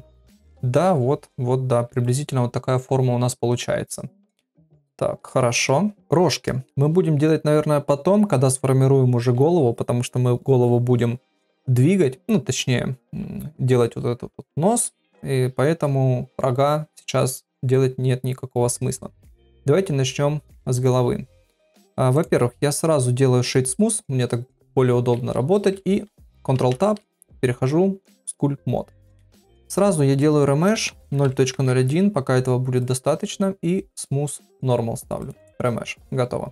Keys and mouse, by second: 0.5 middle click, 1.2 middle click, 3.8-5.7 middle drag, 20.7 click, 22.1-23.6 right drag, 25.5 shift+middle click, 26.5 ctrl+Tab, 29.7-33.1 drag, 34.0-35.5 drag.